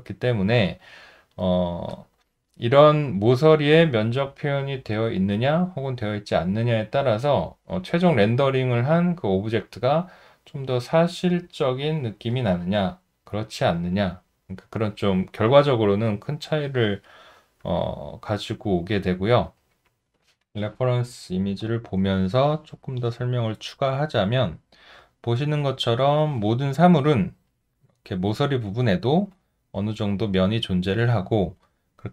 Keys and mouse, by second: 0.1 alt+right click, 0.9 alt+middle click, 1.4 alt+right click, 1.9 alt+click, 2.5 alt+middle click, 18.0 alt+middle click, 19.3 alt+middle click.